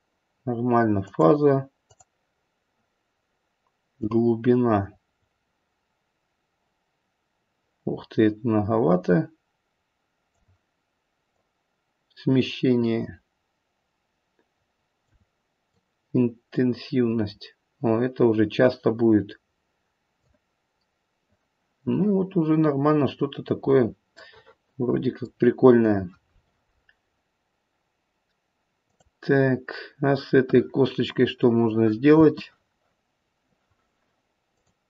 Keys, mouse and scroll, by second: 1.0 click, 1.8 click, 4.0 click, 11.2 click, 15.7 click, 24.1 middle click, 25.6-27.2 scroll down 1, 28.8 click, 32.1 space, 34.4 click.